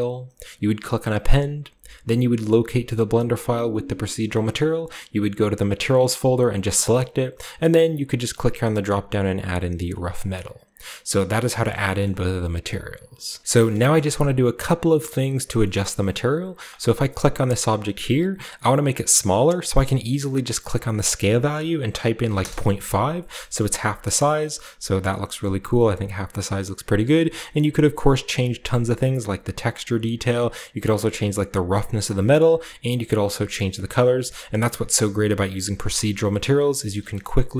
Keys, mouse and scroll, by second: 8.2 click, 10.1 drag, 10.7-11.3 scroll down 1, 11.3 shift+middle click, 11.3 scroll down 1, 11.5-12.9 shift+scroll up 1, 11.6 shift+middle click, 12.0 shift+middle click, 12.9-13.3 scroll up 1, 13.2 middle click, 13.6 shift+middle click, 13.9-14.8 shift+middle drag, 15.1-15.5 middle drag, 15.6-16.6 scroll up 1, 15.7-16.8 shift+middle drag, 16.6-18.3 scroll up 1, 20.6-22.1 drag, 22.1 typing, 22.3 Return, 23.3 shift+middle click, 23.5-24.9 shift+scroll up 1, 23.5 shift+middle click, 24.1 shift+middle drag, 24.4-24.9 shift+middle drag, 25.3-26.5 shift+middle drag, 25.8 shift+click, 26.5 shift+right click, 28.9-30.2 drag, 29.7 right click, 30.2-31.7 right drag, 31.9 click, 32.5 right click, 32.6 click, 33.4-34.8 right drag, 34.9-36.1 drag, 36.1-37.5 scroll down 6, 36.8 middle click, 36.9 a.